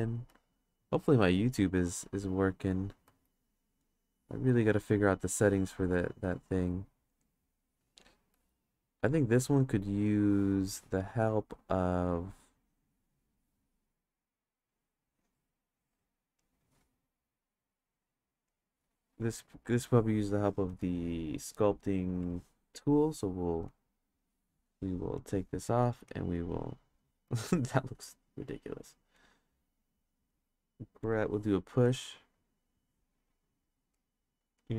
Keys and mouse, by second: 0.3 ctrl+z, 2.3 click, 3.0 ctrl+z, 3.5 click, 6.2-7.5 drag, 8.3 ctrl+z, 8.9-10.1 drag, 10.7 ctrl+z, 12.3 click, 14.7-16.6 drag, 17.8 click, 20.8-22.3 drag, 23.7 click, 25.2-25.6 drag, 26.1-26.9 drag, 27.2 ctrl+z, 29.1 click, 31.9 click, 33.1 click, 34.0 click, 34.6 click.